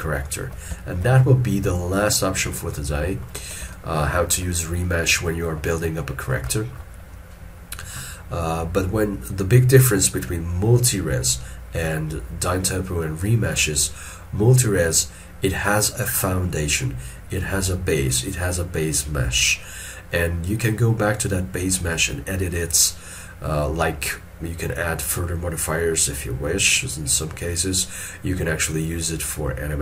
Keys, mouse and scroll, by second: 0.9 shift+middle click, 1.2 shift+middle click, 3.8 ctrl+middle click, 4.9 ctrl+middle click, 5.9 middle click.